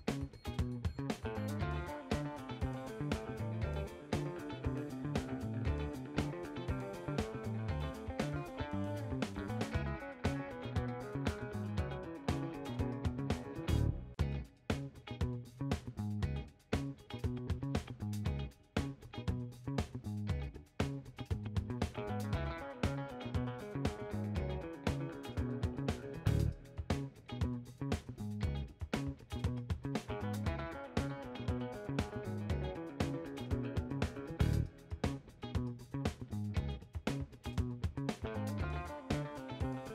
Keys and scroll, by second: 15.2 b, 15.9 ctrl+z.